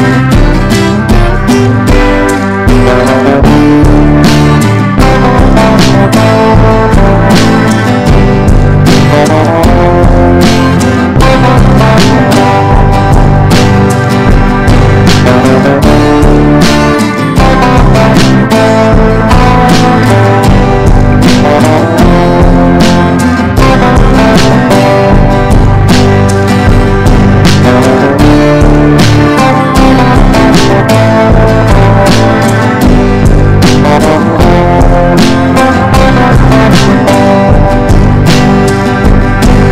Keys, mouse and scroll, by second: 9.6 shift+click, 10.3-12.1 drag, 12.6-13.6 drag, 14.8 shift+click, 15.4 click, 19.9-26.6 drag, 26.9 right click, 27.5-38.6 drag, 39.5-39.7 shift+drag.